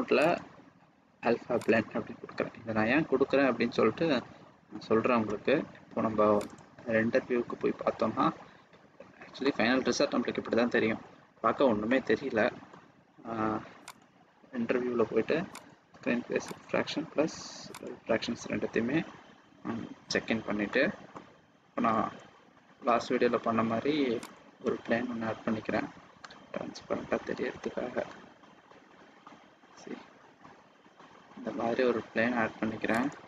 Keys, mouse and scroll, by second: 0.3 click, 7.7 click, 9.4 middle click, 12.7 scroll up 1, 13.8 click, 15.5 click, 17.7 click, 20.6 middle click, 21.9 shift+a, 26.2 s.